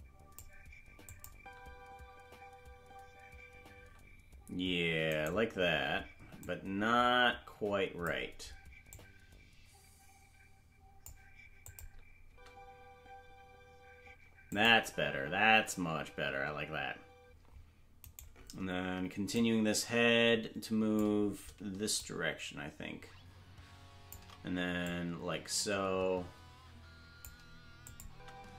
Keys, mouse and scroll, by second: 1.0 click, 1.3 space, 5.3 right click, 5.3 space, 6.4 click, 8.8 click, 11.6 click, 12.2 space, 14.5 click, 14.5 space, 14.8 space, 18.2 right click, 18.2 space, 19.3-21.0 drag, 21.9-24.1 shift+drag, 24.8-27.2 drag, 27.8 click, 28.0 space.